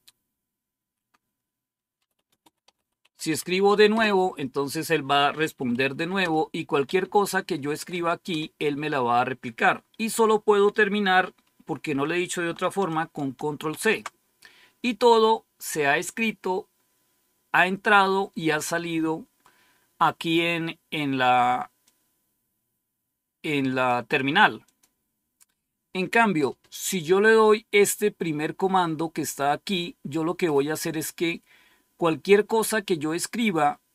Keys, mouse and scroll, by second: 1.7-3.8 typing, 5.6-8.2 typing, 13.6 ctrl+c, 21.7-23.8 drag, 24.6 click, 27.7-29.3 drag.